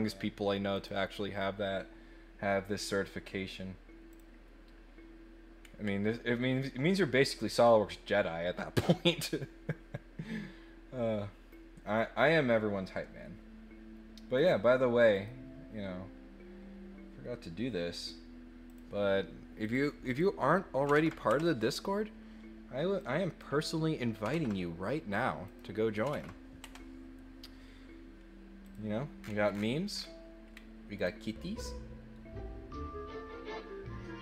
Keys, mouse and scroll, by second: 0.7 click, 5.6 middle click, 14.3 click, 15.1 right click, 18.6 click, 19.6 click, 20.0 click, 23.0 click, 25.4 click, 28.6 click, 29.2-29.6 scroll down 2, 29.9 scroll up 1, 30.5 middle click, 30.9 click.